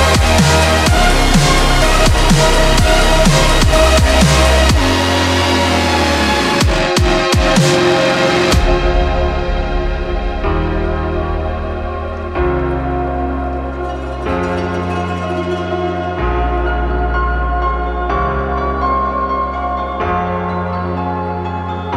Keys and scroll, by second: 5.1 ctrl+z, 5.2 scroll down 1, 21.6 ctrl+z.